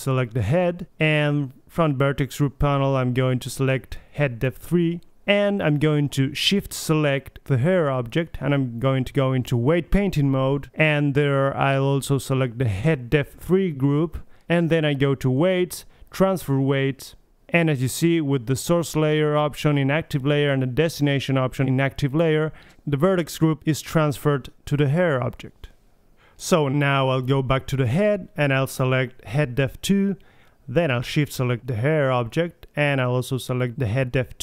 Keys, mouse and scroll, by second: 1.1 click, 1.3 right click, 2.1-3.1 right drag, 3.7-5.8 drag, 6.9-8.1 drag, 8.1 middle click, 8.6-9.8 right drag, 11.0-11.7 drag, 12.7-14.6 drag, 16.9 click, 26.8-28.3 drag, 28.3 middle click, 29.0-30.3 right drag, 30.3 middle click, 30.5-32.1 drag, 32.1 middle click, 32.2 click, 32.2-34.1 right drag.